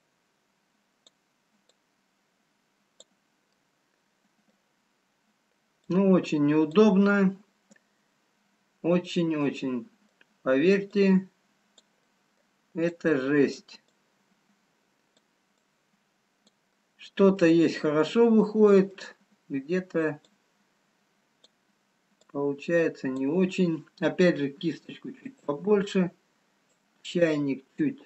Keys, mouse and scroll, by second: 3.7 click, 3.7 middle click, 5.0-5.9 scroll up 2, 6.2 click, 7.3 middle click, 9.9 middle click, 11.3 click, 12.6 middle click, 12.9 click, 15.7 click, 17.9 middle click, 17.9-18.2 scroll down 2, 18.5 middle click, 20.5 click, 22.4 click, 24.6 f, 27.3 click.